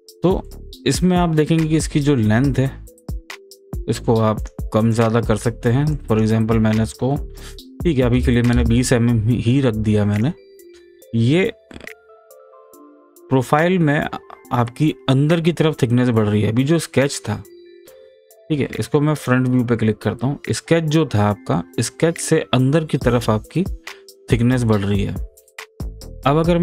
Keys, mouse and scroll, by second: 0.4-4.4 middle drag, 4.4 click, 10.1 click, 11.7-14.6 middle drag, 14.6-15.0 scroll up 1, 15.0-17.3 scroll down 1, 17.7 scroll down 1, 18.1-19.2 scroll up 1, 19.2 click.